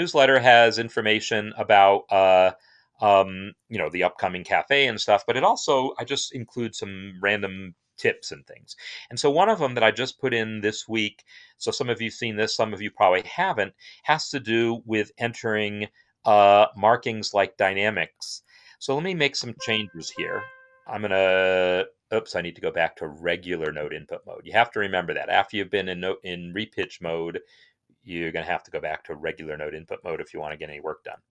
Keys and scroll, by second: 19.9 c, 30.3 6, 31.1 c.